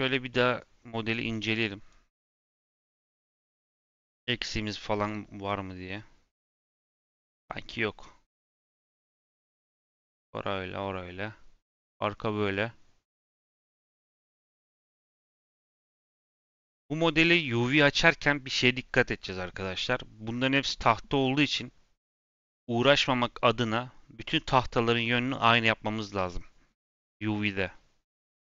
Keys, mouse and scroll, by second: 2.4-6.9 middle drag, 10.2-15.2 middle drag.